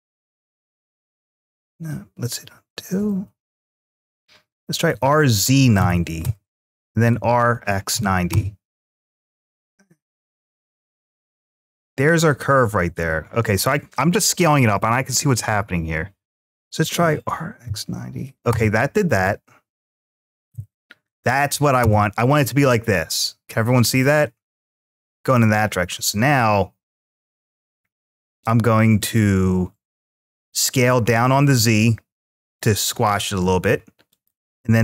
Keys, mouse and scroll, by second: 0.9-1.3 right drag, 2.6 ctrl+z, 4.7 r, 5.2 z, 5.6 9, 6.0 Return, 6.0 0, 14.4 click, 16.8 r, 17.2 x, 17.4 9, 18.3 Return, 18.3 0, 21.3 0, 21.6 Return, 22.9-25.2 middle drag, 25.8 s, 28.8 click, 30.2 s, 30.5 z, 33.9 click.